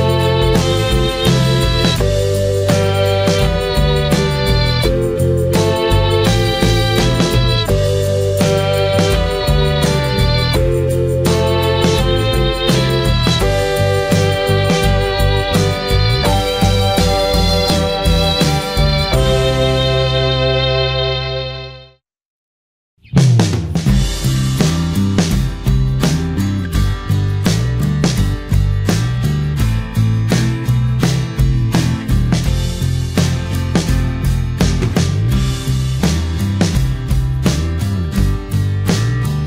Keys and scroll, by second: 0.6 ctrl+j, 1.1 ctrl+d, 3.5 ctrl+j.